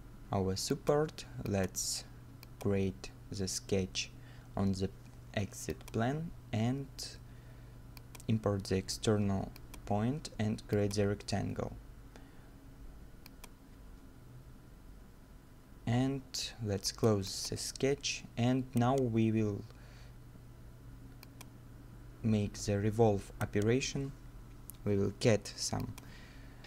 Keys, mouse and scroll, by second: 3.0 scroll up 1, 7.1-9.1 scroll up 1, 11.2 scroll up 1, 11.4-12.0 scroll down 1, 13.5 middle click, 18.4 middle click, 18.5 scroll up 1, 19.4 scroll up 1, 22.7-23.1 scroll up 1, 23.4 right click.